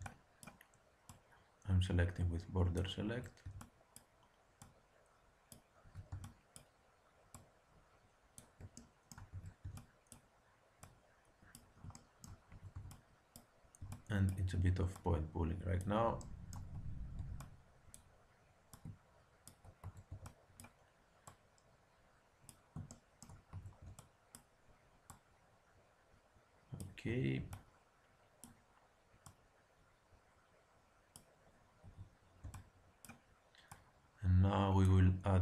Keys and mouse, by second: 1.0-2.8 drag, 3.0 a, 3.4 b, 4.5-6.3 drag, 5.8 a, 6.0 b, 7.3-9.0 drag, 8.7 middle click, 9.3 a, 9.6 b, 10.8-12.6 drag, 12.4 a, 12.7 b, 13.8 b, 16.2 middle click, 16.7 a, 17.1 b, 18.6-19.9 drag, 19.8 a, 20.0 click, 20.0 b, 21.2-22.9 drag, 23.4 a, 23.7 b, 25.0-26.9 drag, 27.0 a, 27.3 b, 29.2-31.1 drag, 31.8 a, 32.4 b, 33.7 click.